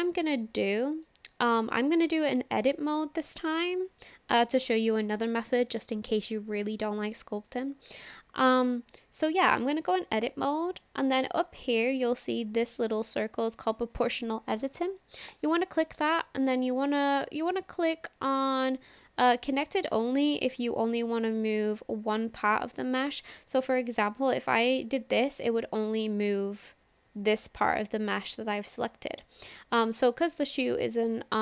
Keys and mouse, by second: 0.5 middle click, 1.1 click, 2.3 click, 2.6-4.1 middle drag, 8.2 shift+middle click, 15.3 click, 16.0-20.1 drag, 20.7 click, 22.7 click, 24.1-28.8 drag, 29.3 ctrl+z, 31.3 click.